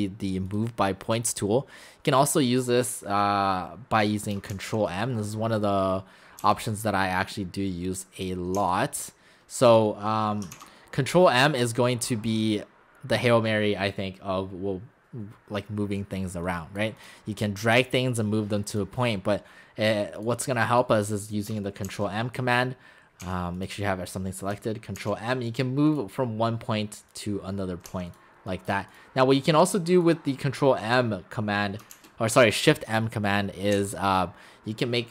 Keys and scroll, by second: 21.9 shift+m, 23.2 x, 25.0 shift+m, 27.9 x, 31.9 shift+m, 33.8 x.